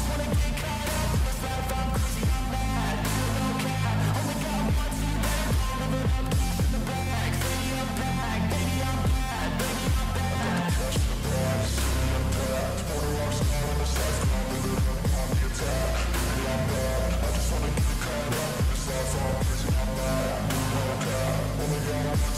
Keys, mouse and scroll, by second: 18.5-22.3 typing.